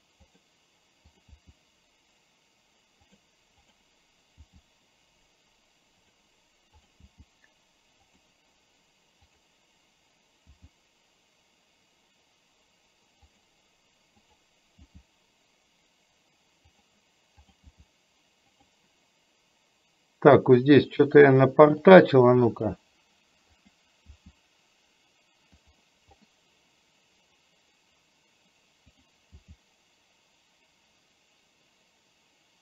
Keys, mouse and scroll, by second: 1.1 click, 1.5 g, 3.8 click, 4.5 g, 7.1 g, 9.3 click, 10.5 g, 14.9 g, 17.6 click, 17.8 g, 20.8 click, 21.8 click, 22.6 click, 23.5 click, 24.1 g, 29.0 click, 29.4 g.